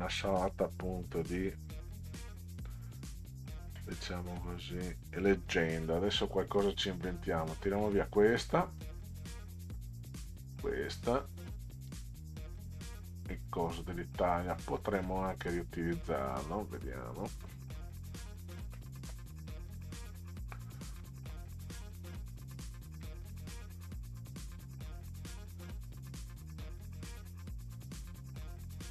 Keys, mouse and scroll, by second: 1.5-7.1 drag, 7.7 Delete, 8.8-10.2 drag, 10.4 Delete, 11.3-13.9 drag, 15.1 Delete, 15.5 click, 18.7-19.1 middle drag, 21.0 middle drag, 22.9 Delete, 23.3 click, 27.7-28.9 drag.